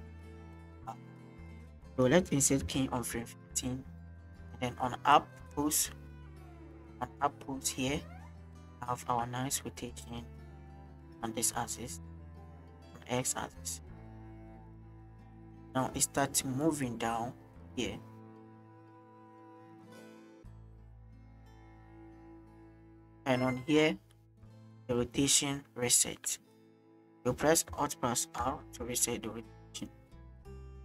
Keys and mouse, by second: 4.4-5.0 middle drag, 4.4 i, 5.2-8.4 drag, 8.9-9.2 shift+middle drag, 9.9 middle click, 15.0 middle click, 15.7-18.4 drag, 18.7-19.0 shift+middle drag, 23.2-27.2 drag, 28.8 alt+r.